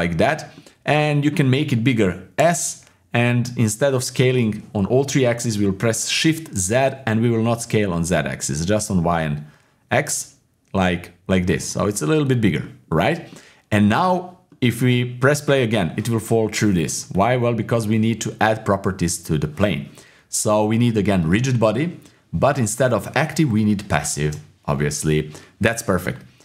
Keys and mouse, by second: 0.5 click, 2.4 s, 12.6-13.9 drag, 14.5 click, 15.8-18.8 drag, 21.3 click, 22.5-23.8 drag.